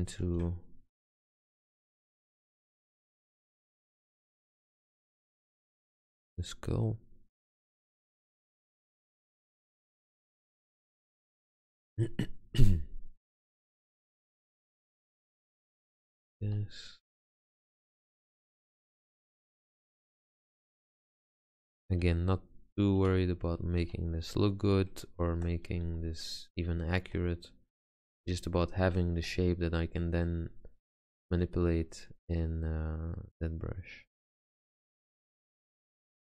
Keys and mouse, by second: 0.0 middle click, 0.4 ctrl+z, 1.9 e, 2.9 r, 4.0 g, 8.9 g, 15.4 e, 16.6 g, 17.5 click, 17.6 r, 18.6 g, 19.6 Tab, 22.2 g, 23.1 r, 24.0 g, 25.4 click, 25.9 g, 28.3 g, 29.3 r, 30.7 z, 34.6 z.